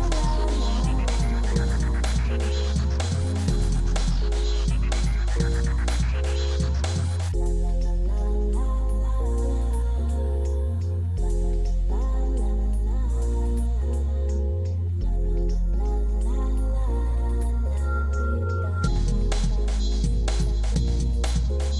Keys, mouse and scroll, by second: 3.1-3.5 middle drag, 7.3-9.3 middle drag, 12.7-14.4 middle drag, 14.7 click, 16.3 middle click, 16.5-18.3 middle drag.